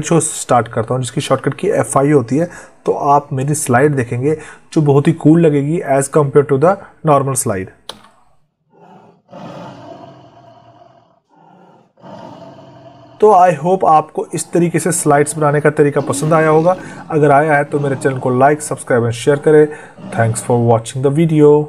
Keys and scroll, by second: 7.7 F5.